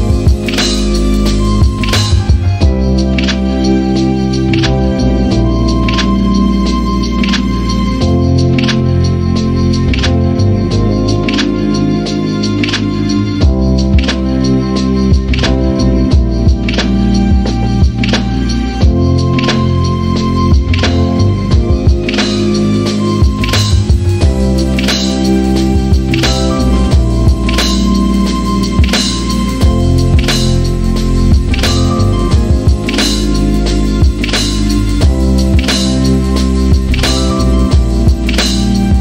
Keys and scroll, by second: 2.3-3.6 typing, 4.2 Return, 5.9 1, 17.3 ctrl+z, 17.8 ctrl+z, 19.5 l, 29.0 t.